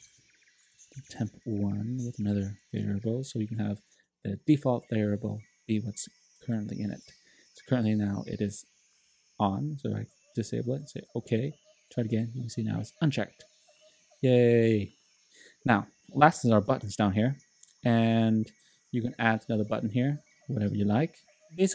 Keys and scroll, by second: 0.0-2.5 typing.